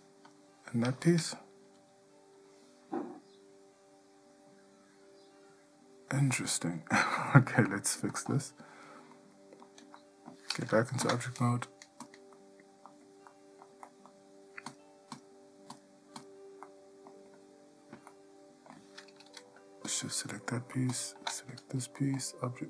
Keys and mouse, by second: 1.8 g, 9.3-9.8 middle drag, 10.2-10.5 shift+middle drag, 11.2 Tab, 12.5-13.0 middle drag, 13.5-14.0 shift+middle drag, 14.0 middle click, 14.9 click, 16.4 click, 16.8-17.3 middle drag, 18.3-18.9 ctrl+middle drag, 22.4-22.6 drag.